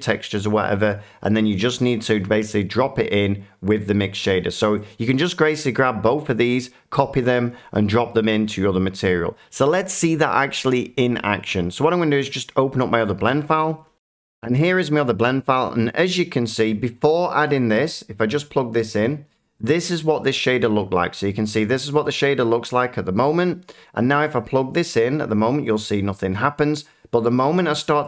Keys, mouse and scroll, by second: 1.4-2.1 scroll, 4.8 click, 5.6 shift+click, 13.8 F9, 13.9 click, 15.8 middle click, 19.2-21.3 drag, 22.6-25.6 shift+middle drag, 25.6-26.4 drag.